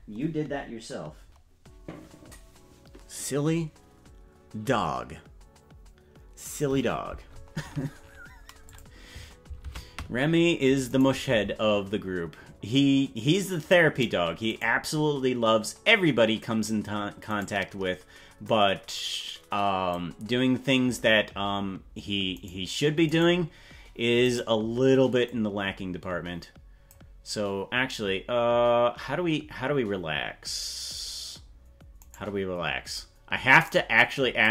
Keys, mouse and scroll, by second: 8.7 click, 9.7 ctrl+Tab, 10.9 right click, 12.7-13.7 drag, 14.5 right click, 15.6-16.8 drag, 17.4 right click, 18.6-19.9 drag, 22.4 right click, 23.2 right click, 24.4 right click, 25.2-26.9 drag, 32.2 right click, 32.9-34.5 drag.